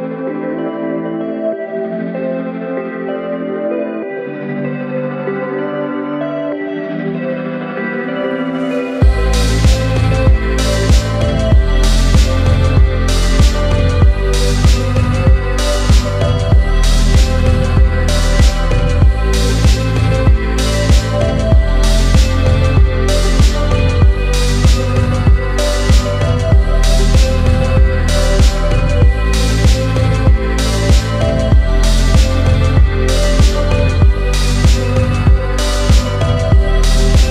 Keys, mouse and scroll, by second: 0.1-2.5 drag, 2.8-8.6 middle drag, 9.0-10.8 scroll up 2, 10.8 KP_Divide, 12.5 click, 12.9 alt+click, 13.6 alt+shift+click, 14.3 alt+shift+click, 15.0 alt+shift+click, 16.0 alt+shift+click, 16.8 alt+shift+click, 17.6 alt+shift+click, 18.5 alt+shift+click, 19.2 alt+shift+click, 20.0 alt+shift+click, 20.8 alt+shift+click, 21.5 alt+shift+click, 22.3 alt+shift+click, 23.0 alt+shift+click, 23.8 alt+shift+click, 24.7 alt+shift+click, 25.3 alt+shift+click, 26.1 alt+shift+click, 26.7 alt+shift+click, 27.5 alt+shift+click, 28.8 alt+shift+click, 29.5 alt+shift+click, 30.2 alt+shift+click, 31.2 alt+shift+click, 32.2 alt+shift+click, 33.1 alt+shift+click, 33.9 alt+shift+click, 34.6 alt+shift+click, 36.2 ctrl+b.